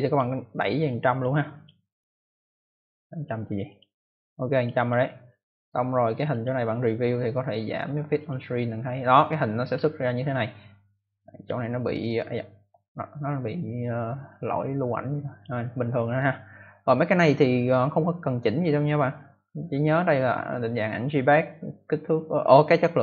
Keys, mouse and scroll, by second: 0.0 click, 0.6 click, 1.4 click, 1.6 click, 3.1 click, 3.6 click, 4.3 click, 4.7 click, 5.6-6.0 scroll down 1, 6.2 click, 8.1 click, 11.0 click, 14.2 click.